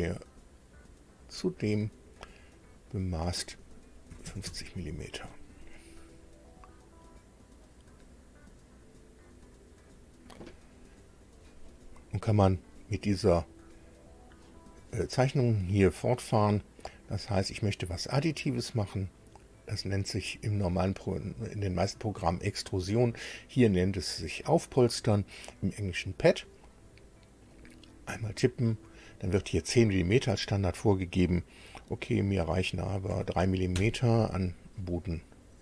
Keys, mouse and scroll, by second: 1.1 click, 2.5 click, 4.1 KP_5, 4.2 KP_0, 4.4 KP_Enter, 6.5-7.8 drag, 9.3 click, 13.4 click, 27.5 click, 33.1 KP_3.